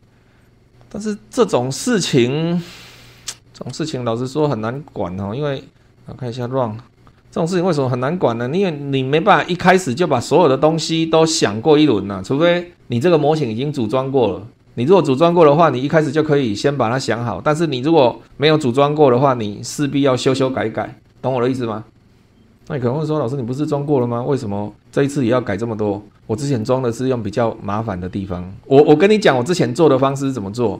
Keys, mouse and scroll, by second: 0.4 click, 0.7-2.1 drag, 3.1 click, 3.5-4.1 scroll down 4, 4.4-4.9 shift+middle drag, 5.1-5.4 shift+scroll up 3, 6.3 click, 7.6-8.1 scroll down 2, 8.4 scroll up 2, 22.5 click, 23.9 click, 24.8-25.3 scroll up 2, 25.3-25.9 scroll down 4, 26.5 click, 30.1 click.